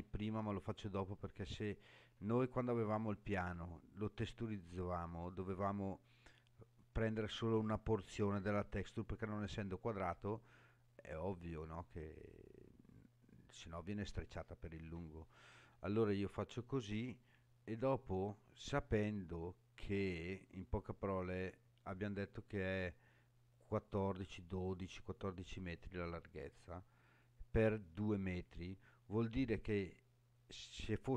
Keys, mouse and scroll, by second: 1.1-1.8 scroll down 3, 17.6 scroll down 2.